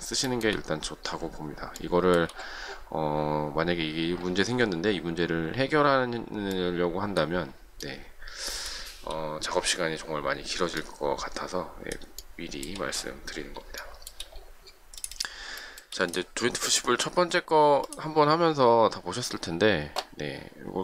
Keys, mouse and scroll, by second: 0.2 shift+middle click, 7.7 shift+middle click, 8.5-9.8 shift+scroll up 1, 12.2 shift+middle click, 13.8 shift+middle click, 15.5 shift+middle click.